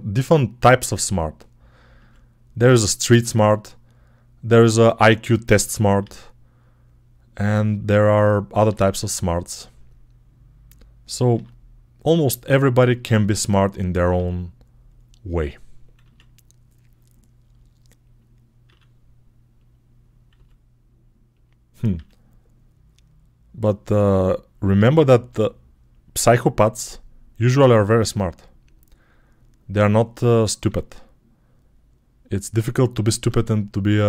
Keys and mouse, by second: 0.4 e, 1.8 s, 4.5 click, 5.8 e, 7.6 click, 8.5 g, 11.2 f, 14.0 e, 14.5-33.3 middle drag, 15.8 s, 18.5 e, 20.2 s, 21.8 e, 24.6 e, 26.5 s, 30.5 f.